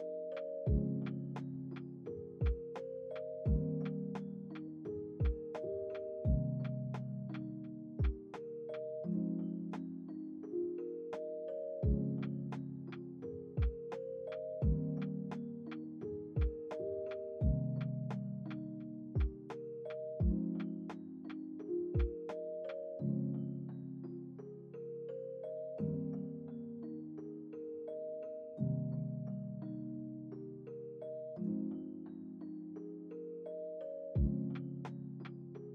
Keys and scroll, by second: 4.0 ctrl+s, 32.0 ctrl+c, 33.7 ctrl+v, 35.0 ctrl+s.